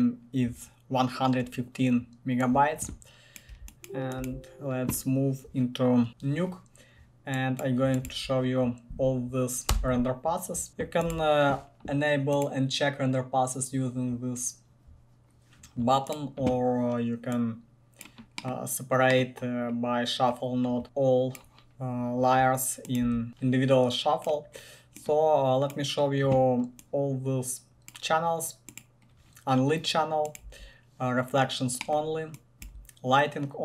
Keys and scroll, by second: 3.7 1, 4.5 1, 6.5 typing, 8.3 Tab, 9.9 Return, 10.3-11.3 typing, 23.3 1, 30.7 1, 32.9 1.